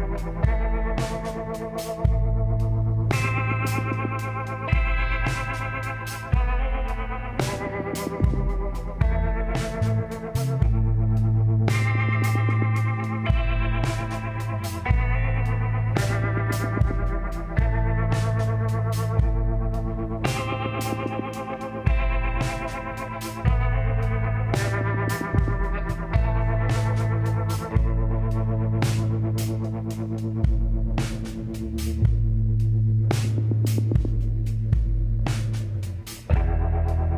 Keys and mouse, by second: 0.2-1.9 drag, 0.4 b, 4.5-6.4 drag, 4.8 b, 6.7 KP_Decimal, 8.4 z, 11.2 shift+s, 13.2 shift+a, 15.1 t, 16.0 click, 17.8 s, 20.9 r, 25.1 s, 28.0-30.5 drag, 29.4 x, 30.5 middle click, 31.4-34.0 drag, 33.3 f, 34.4-36.1 drag, 36.5 s.